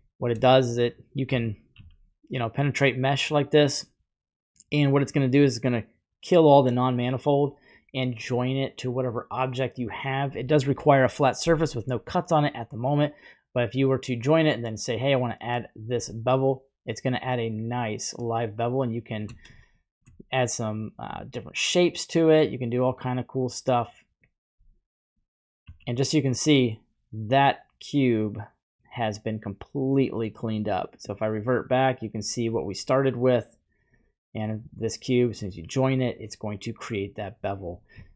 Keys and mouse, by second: 1.7 typing, 8.3 click, 11.5 typing, 12.9 click, 14.7 click, 16.4-17.6 shift+drag, 18.2-19.2 shift+drag, 19.6-20.0 shift+middle drag, 21.2-24.2 shift+drag, 25.7 z, 26.3-26.7 middle drag, 27.3-28.8 middle drag, 30.9 click, 31.0 typing, 35.2 click, 36.2-37.5 middle drag, 38.0 shift+middle click.